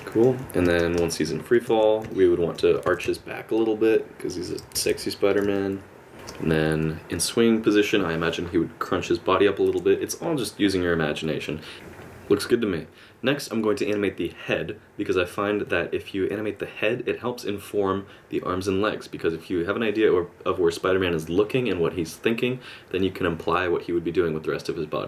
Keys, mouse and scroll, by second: 0.6 space, 1.0 space, 1.7 alt+r, 2.1 middle click, 2.7 r, 4.6 r, 5.5 middle click, 6.1 space, 11.7 space.